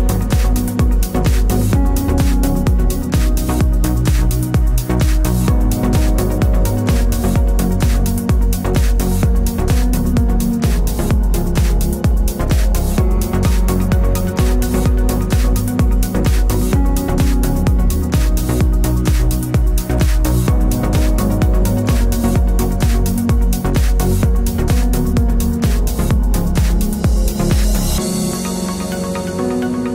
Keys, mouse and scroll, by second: 3.9 KP_Subtract, 4.2 KP_4, 4.4 KP_5, 5.7 click, 6.3 KP_5, 6.9 Tab, 7.6 KP_1, 7.7 KP_0, 9.1 click, 10.5 click, 10.9 t, 12.1 alt+shift+click, 13.9 KP_Enter, 14.7 click, 17.2 Down, 19.3 shift+click, 20.3 ctrl+g, 21.0 click, 21.6-23.0 typing, 23.3 ctrl+a, 23.8 click, 24.4 d, 25.8 click, 27.0 ctrl+t, 27.9 alt+shift+click.